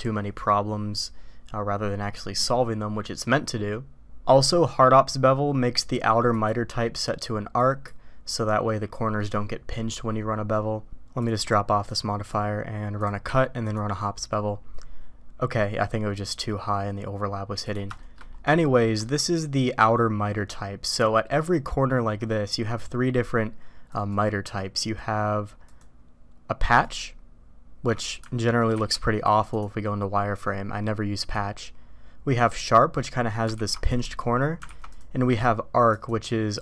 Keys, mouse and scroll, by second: 6.3-7.9 drag, 11.2 click, 11.9-13.1 drag, 13.3 q, 18.0 shift+middle drag, 19.0-19.6 shift+middle drag, 23.8 click, 24.7 click, 25.7-26.8 drag, 28.7 alt+v, 31.1-32.5 drag, 33.5 alt+v, 34.7 alt+v, 35.8-36.6 drag.